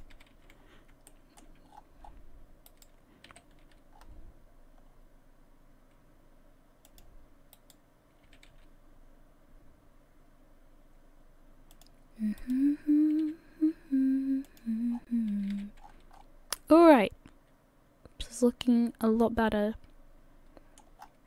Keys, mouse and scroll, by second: 0.2 a, 0.3 a, 0.6-0.9 scroll down 3, 1.1 shift+middle click, 1.7-2.2 scroll up 9, 2.7 right click, 3.3 g, 7.6 right click, 8.3 g, 12.4 right click, 13.3 g, 14.9-15.4 scroll down 6, 15.4 a, 15.8-16.1 scroll down 2, 15.8 a, 16.1 scroll up 4, 16.6 middle click, 21.0-21.2 scroll up 6.